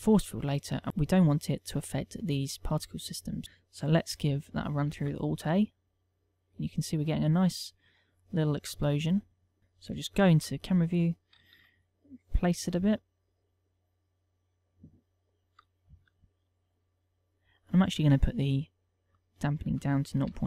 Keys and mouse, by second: 5.6 alt+a, 9.2 click, 9.6 alt+a, 9.8 click, 10.9 KP_0, 12.2 g, 13.4 click, 13.5 alt+a, 15.6 click, 19.0 middle click, 20.0 ctrl+click.